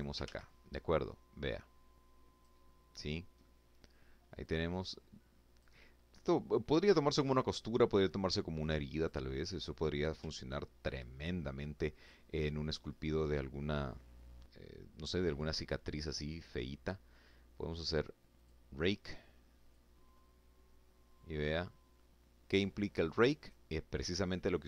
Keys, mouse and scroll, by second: 1.8-2.3 scroll down 2, 2.3 middle click, 3.3-4.6 drag, 5.0-5.5 scroll up 2, 6.0-6.3 scroll down 2, 7.2 click, 8.3 middle click, 10.2-10.6 scroll down 2, 10.6 click, 10.7 middle click, 17.2 click, 18.6-22.5 drag, 22.8-24.2 middle drag, 24.3-24.6 scroll up 2.